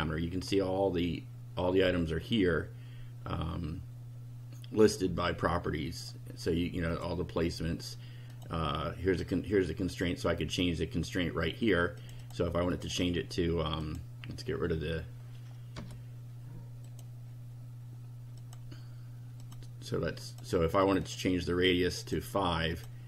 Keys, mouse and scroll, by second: 6.9 click, 8.3 click, 9.2 click, 9.9 click, 12.0 click, 12.7 click, 13.8 click, 15.8 BackSpace, 16.8 click, 18.4 click, 19.4 click, 20.3 click, 20.8 click, 22.0 click, 22.7 click.